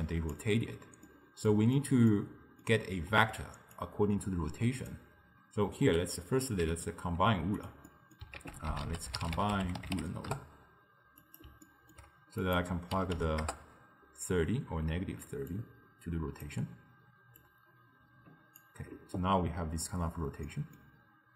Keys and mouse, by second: 0.4 d, 1.1-3.8 middle drag, 3.8 drag, 7.9 middle click, 8.4 ctrl+a, 11.7-12.5 ctrl+middle drag, 12.5-15.6 drag, 17.5-20.5 drag, 20.5-21.3 middle drag.